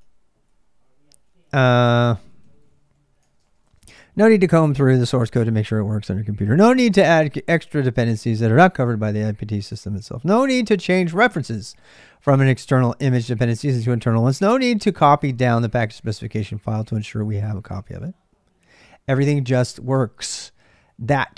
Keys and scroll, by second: 0.0-21.3 typing.